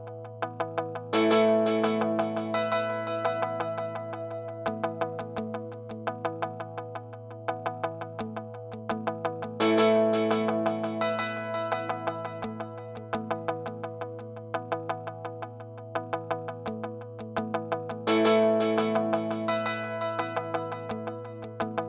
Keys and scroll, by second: 8.7 super+z, 16.9 super+z, 18.7-19.5 typing.